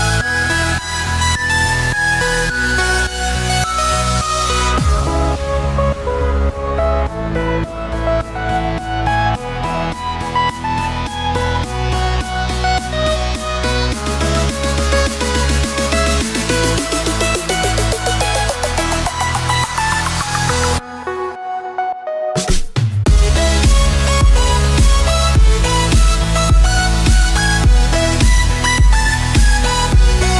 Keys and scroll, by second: 0.9 z, 4.5 ctrl+z, 5.1 space, 6.8 z, 7.1 ctrl+space, 7.5 z, 8.7 ctrl+z, 8.8 space, 9.6 space, 10.3 F7, 11.1 ctrl+0, 12.3 ctrl+alt+i, 14.4 Return, 15.8 ctrl+space, 17.6 z, 22.4 space, 22.4 x, 24.4 z, 27.2 x, 28.1 9.